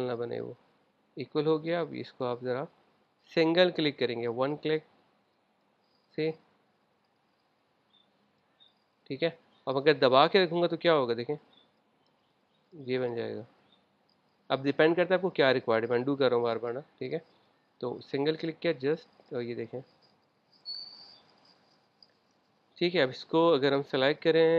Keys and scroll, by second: 7.0 super+z, 9.8 super+z, 14.5 super+z, 17.7 super+z.